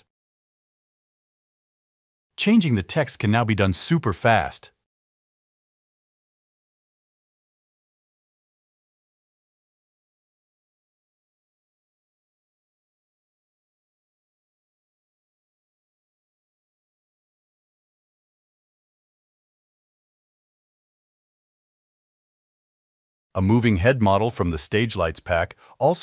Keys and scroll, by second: 1.9 BackSpace, 3.9-6.7 typing.